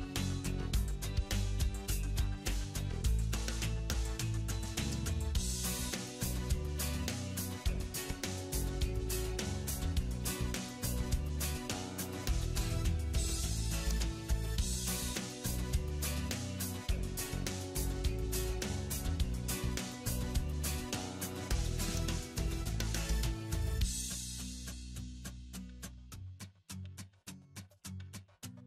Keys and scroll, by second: 6.8 alt+w, 8.9 ctrl+z, 10.6 alt+w.